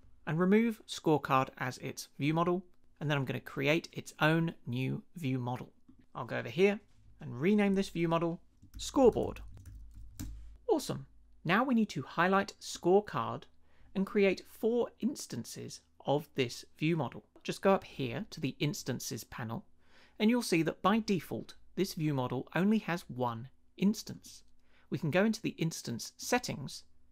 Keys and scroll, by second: 8.5-10.6 typing.